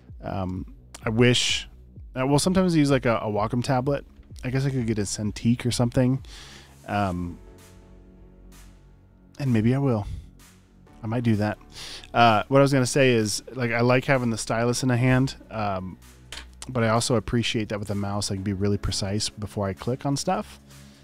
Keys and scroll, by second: 0.1 space, 2.7 typing.